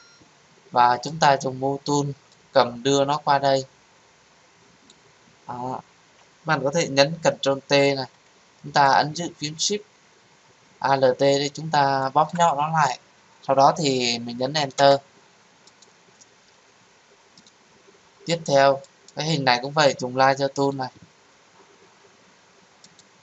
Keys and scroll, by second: 7.2 ctrl+t, 14.7 Return.